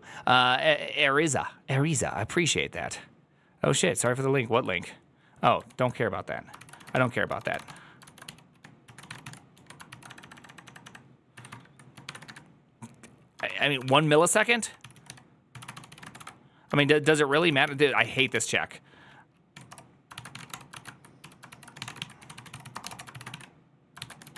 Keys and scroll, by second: 5.6 alt+[, 5.6 alt+{, 6.4-24.3 typing, 19.4 Tab, 19.6 Return, 21.4 ctrl+c.